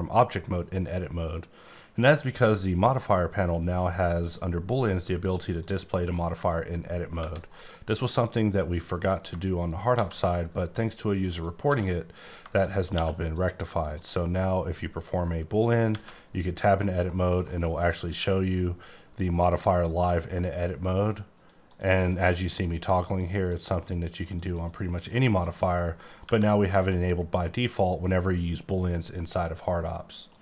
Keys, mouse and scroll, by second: 1.6 click, 5.2 click, 5.6 click, 6.0 click, 6.4 double click, 7.2 Tab, 7.5 middle click, 9.7 right click, 9.9 shift+a, 11.2 click, 11.6 s, 12.2 click, 12.9 q, 13.3 click, 13.9 click, 15.9 Tab, 17.0 middle click, 21.4 click, 21.7 click, 22.0 click, 22.3 double click, 22.6 click, 22.9 double click, 23.2 click, 23.5 click, 24.2 click, 24.5 double click, 24.9 click, 25.4 click, 26.0 middle click, 26.2 scroll down 1, 26.2 Tab.